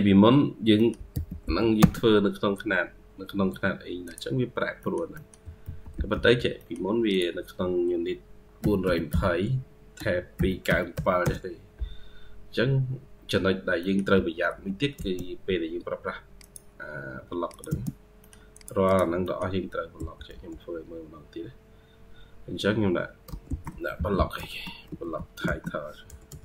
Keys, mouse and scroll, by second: 0.0-0.6 scroll up 3, 0.6 middle click, 1.0 u, 4.6 middle click, 5.0 middle click, 5.3 typing, 6.4 middle click, 10.2-11.3 typing, 12.4-13.7 scroll up 8, 13.7 middle click, 14.4 typing, 17.5 space, 17.8 scroll down 1, 17.8 space, 18.1 middle click, 18.7 double click, 19.1 middle click, 19.8-20.8 typing, 20.4-20.8 scroll up 1, 23.8-26.3 typing.